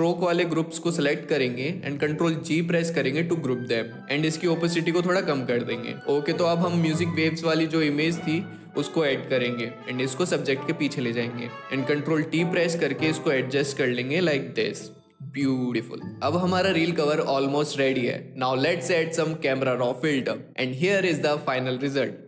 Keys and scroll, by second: 1.8 ctrl+g, 11.6 ctrl+t.